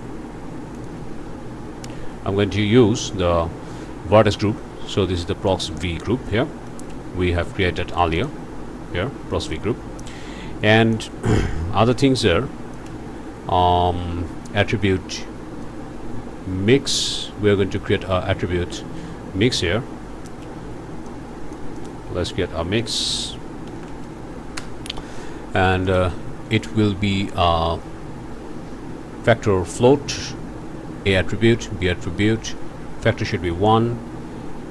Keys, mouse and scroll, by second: 0.8 click, 0.8 ctrl+space, 3.0 click, 5.5 click, 6.3 scroll down 2, 6.7 click, 8.2 click, 10.8 click, 11.3 click, 12.3 click, 12.9 ctrl+space, 15.7-17.2 drag, 17.2-17.5 scroll down 2, 19.9 scroll down 2, 20.3 click, 21.1 click, 21.8 shift+click, 22.1 shift+a, 22.8 click, 23.7 m, 23.8 i, 23.9 x, 24.6 Return, 25.9 click, 33.3 click.